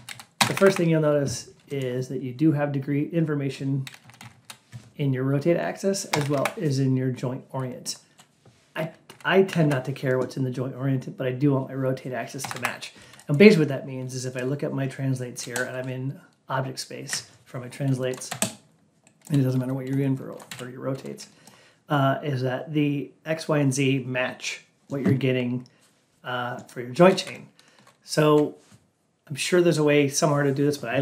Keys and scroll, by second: 0.3 Up, 3.9 Down, 6.0 Up, 9.0 Down, 9.6 Down, 12.3 Up.